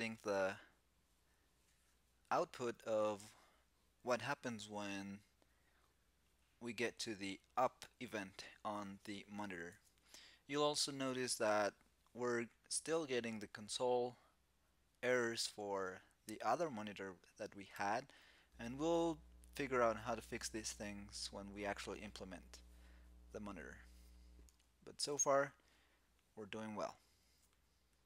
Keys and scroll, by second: 9.4 super+Tab.